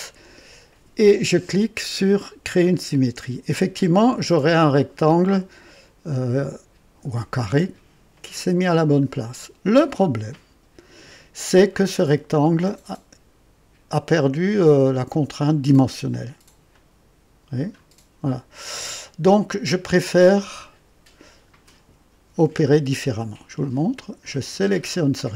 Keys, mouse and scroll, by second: 2.6 click, 6.6-7.0 scroll up 1, 11.8 right click, 12.6 click, 16.7-17.8 drag, 20.0 click, 20.6 click, 22.6-23.3 right drag, 23.6-24.8 drag.